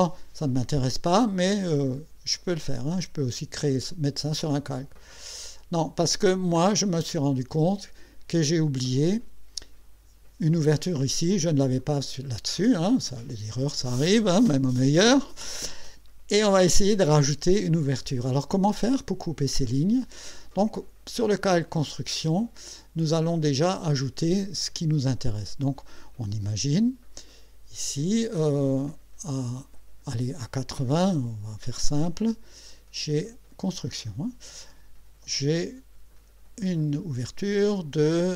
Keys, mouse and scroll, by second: 5.4 click, 6.6 scroll up 2, 11.8 click, 12.6 click, 22.2 click, 23.7 click, 27.3 click, 33.8 click, 37.0 click.